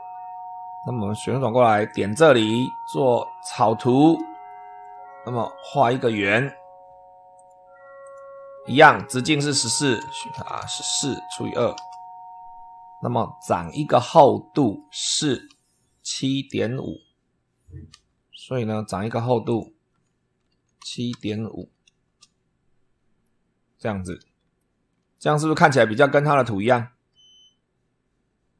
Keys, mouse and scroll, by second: 0.0 super+3, 0.7 super+click, 0.9 middle click, 1.8 click, 3.3 click, 4.4 shift+middle click, 5.9 click, 7.2 click, 7.9 click, 8.4 Escape, 9.6 click, 9.8-11.8 typing, 13.5 click, 14.2 click, 17.8 super+3, 19.4 click, 20.4-22.0 typing, 23.1-24.2 middle drag, 24.4 shift+middle click, 25.0-26.2 shift+middle drag.